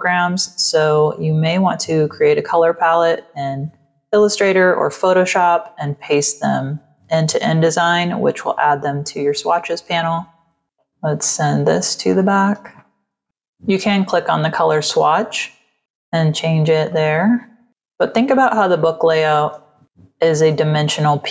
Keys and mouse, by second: 9.3 click, 11.1 click, 12.0 click, 12.7 click, 13.0 space, 13.1 click, 13.9 click, 16.8 click, 17.9 click, 19.0 v, 19.4 space, 19.6 click.